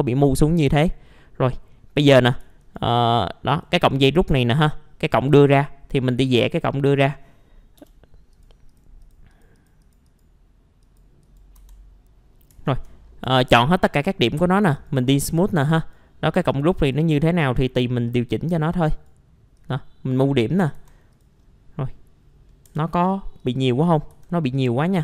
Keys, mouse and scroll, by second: 0.4 middle click, 1.1-1.5 scroll up 1, 1.5 middle click, 2.3 scroll up 1, 2.6 ctrl+right click, 3.5 click, 7.8 BackSpace, 8.3 click, 11.2 right click, 12.7 ctrl+a, 13.2 F3, 13.9 right click, 14.7-18.9 drag, 20.5 middle click, 21.1 click, 21.4 scroll down 1, 22.3-22.7 scroll up 1, 22.7 F3, 23.1 scroll up 1, 23.4 click, 24.1 r.